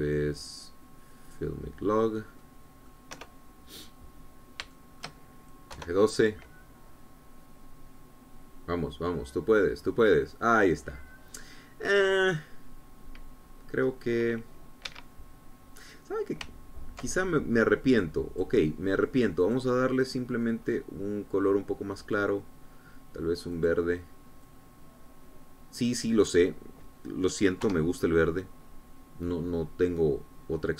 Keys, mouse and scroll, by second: 2.4 click, 3.2-3.5 scroll down 1, 3.6 middle click, 4.3 KP_0, 5.4-5.8 scroll down 1, 5.9 shift+middle click, 6.9 F12, 11.7-12.1 scroll down 2, 12.3 scroll up 2, 14.5-15.0 scroll down 2, 15.0-15.3 scroll up 2, 16.0 Escape, 19.2 click, 20.6 click, 21.8-22.2 scroll up 1, 22.4 scroll down 1, 24.7 click, 25.6-27.4 drag, 28.9 F12.